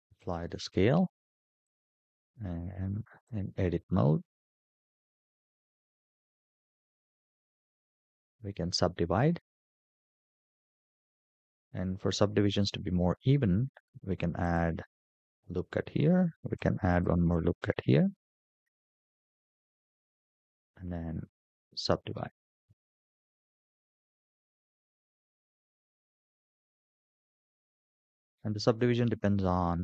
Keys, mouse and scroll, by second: 1.4-3.0 drag, 4.4 scroll down 2, 5.1 middle click, 6.6-8.1 right drag, 12.9 ctrl+r, 16.3 ctrl+r, 17.6 middle click, 18.8-19.4 scroll down 1, 19.4 scroll down 1, 19.6 a, 20.0-21.3 right drag, 21.9 shift+middle click, 23.5 click, 25.3 click, 25.7 click, 26.0 click, 26.4 click, 26.6 click, 26.8 click, 27.1 click, 28.6 click.